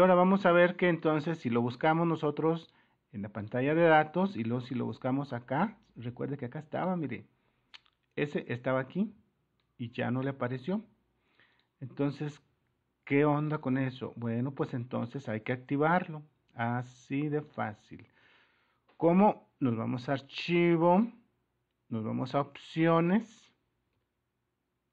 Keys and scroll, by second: 23.9 super++.